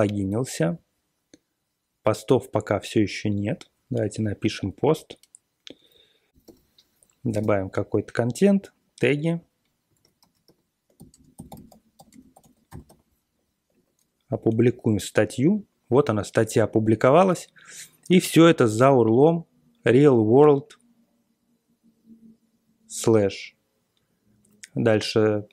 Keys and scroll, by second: 6.3-7.4 typing, 9.6-13.3 typing.